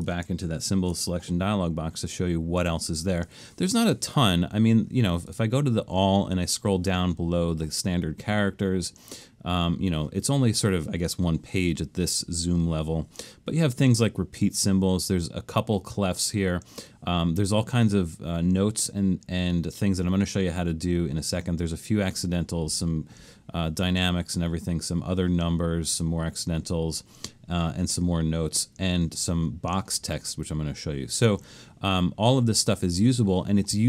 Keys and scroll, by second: 0.5 alt+shift+super+s.